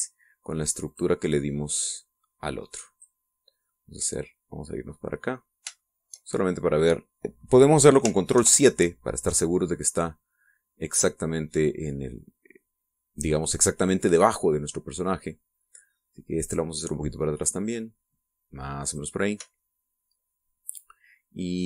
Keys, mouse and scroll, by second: 0.4 x, 1.8 click, 2.9-4.1 drag, 4.5-6.3 drag, 6.7 shift+click, 6.8 shift+middle click, 6.9 shift+click, 7.2 shift+middle click, 7.3 shift+click, 9.3 ctrl+KP_7, 13.1-16.3 drag, 17.3 right click, 17.8-20.1 drag, 20.1-20.5 scroll up 1, 20.5-21.6 shift+middle drag.